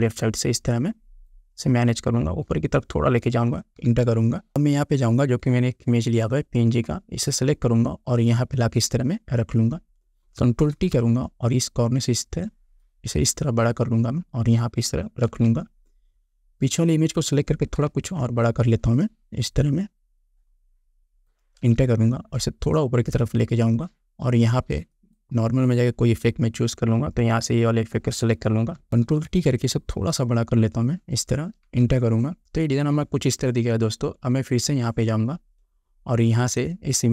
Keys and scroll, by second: 4.1 Return, 11.0 ctrl+t, 15.5 Return, 17.9 ctrl+t, 21.8 Return, 29.3 ctrl+t, 31.9 Return.